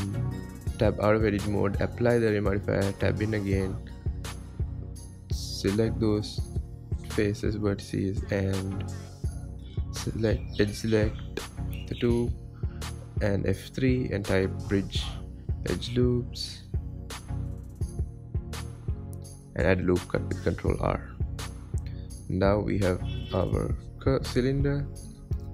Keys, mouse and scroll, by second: 1.0-1.6 drag, 1.6 Tab, 2.4 click, 3.0 Tab, 3.4-5.3 scroll up 3, 5.3 click, 6.9 x, 8.0 scroll up 2, 8.8 alt+click, 9.5 alt+click, 10.5 alt+shift+click, 11.5 f, 13.4 ctrl+z, 14.6-16.6 middle drag, 16.6 KP_1, 18.3 F3, 20.1 ctrl+r, 21.0 click, 21.4 Tab, 21.6-22.8 scroll down 20, 22.8-23.3 shift+middle drag, 23.3 scroll up 8, 23.6 scroll down 1, 23.7-24.6 scroll up 4, 24.6-25.5 scroll up 1.